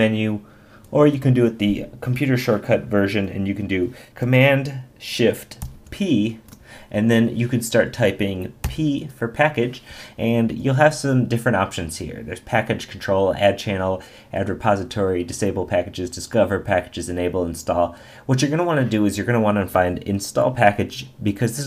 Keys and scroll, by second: 1.0 Escape.